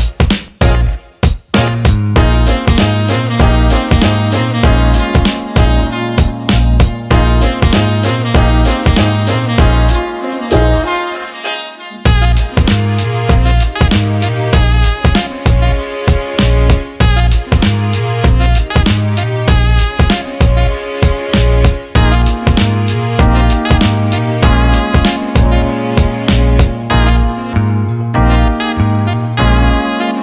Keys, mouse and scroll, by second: 0.7 click, 1.2 click, 1.6 click, 2.4 click, 3.3 alt+middle click, 4.2 alt+middle click, 4.6 alt+shift+middle click, 5.0 alt+middle click, 6.8 click, 10.4 Tab, 13.6 shift+click, 14.9 ctrl+KP_Add, 16.7 click, 17.6 click, 19.5-24.0 drag, 25.1-26.9 drag.